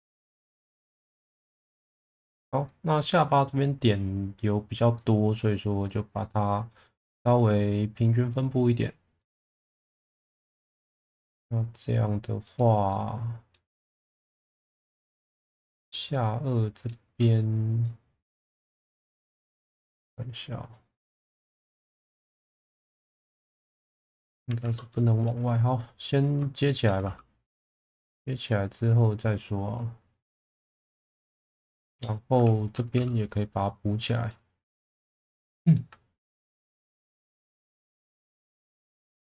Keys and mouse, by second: 1.7 click, 2.6 click, 3.7 click, 5.1 click, 7.4 click, 8.3 click, 11.1-12.4 middle drag, 12.8-13.5 middle drag, 13.8 click, 14.4 middle click, 15.0 click, 15.7 click, 16.1 middle click, 17.8 middle click, 20.0-21.3 middle drag, 23.1-24.3 middle drag, 24.6 ctrl+z, 24.9 middle click, 25.4 2, 25.9 click, 26.7 shift+click, 27.0 f, 27.4-27.8 middle drag, 28.1 shift+middle drag, 30.3-31.3 middle drag, 32.9 f, 33.3 middle click, 35.4 alt+middle click, 36.8 1, 38.0 click.